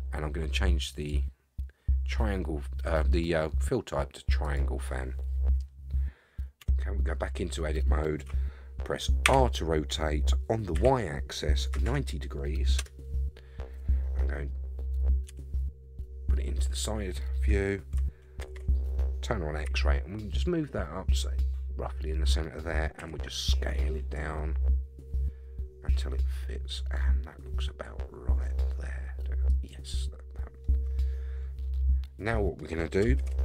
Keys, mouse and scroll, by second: 0.9-4.7 drag, 6.6 Tab, 7.6-8.7 scroll down 2, 9.2 r, 15.3 KP_3, 16.8-18.0 scroll up 2, 18.4 alt+z, 19.6 g, 23.0 s, 30.6-31.7 middle drag, 32.2-32.6 scroll down 1, 33.2 alt+z.